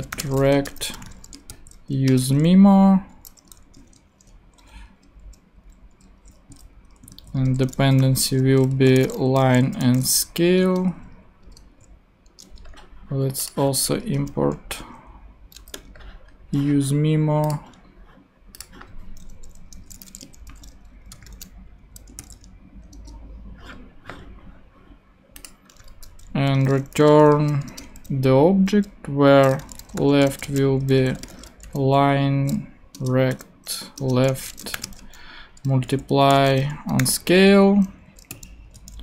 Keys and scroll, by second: 0.0-2.0 typing, 2.0 shift+Return, 2.6 Return, 3.9 shift+[, 5.9 BackSpace, 6.5 Down, 6.7 Right, 7.4 alt+shift+BackSpace, 8.0-10.4 typing, 10.6 Return, 12.4 alt+Escape, 14.0 alt+Return, 15.7 Escape, 20.0-22.1 typing, 22.9 shift+Return, 25.6-27.3 typing, 26.5 Return, 27.7 shift+Return, 28.4 Return, 29.3-31.8 typing, 32.9 Return, 33.9 Return, 34.4-37.0 typing, 38.7 super+,.